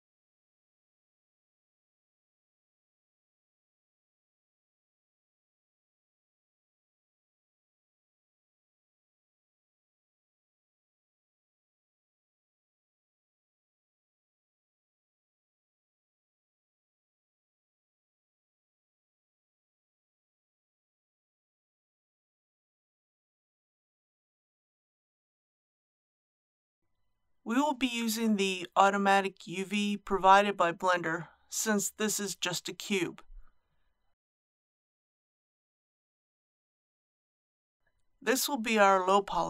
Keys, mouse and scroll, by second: 0.7 click, 2.2 ctrl+r, 2.8-3.5 scroll up 1, 3.5 click, 4.1 typing, 5.8 typing, 9.5 click, 10.7 KP_3, 12.7 ctrl+r, 13.3-13.8 scroll up 1, 14.0 click, 14.9 s, 15.3 y, 18.8 typing, 19.1 click, 24.6 Tab, 26.2 KP_1, 26.8 middle click, 27.2 click, 29.8-33.4 typing, 35.3-36.3 drag, 36.4-36.8 scroll down 1.